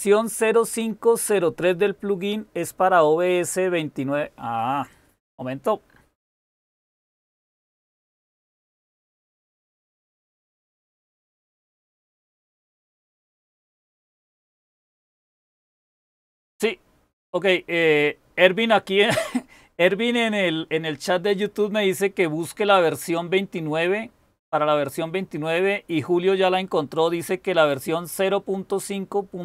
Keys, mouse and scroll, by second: 5.8-6.4 scroll down 1, 6.4-6.9 scroll down 1, 6.9-7.5 scroll down 1, 7.5-8.8 scroll down 1, 8.8-11.6 scroll down 1, 11.6-13.3 scroll down 1, 13.3-17.4 scroll down 1, 17.4-29.4 scroll down 1.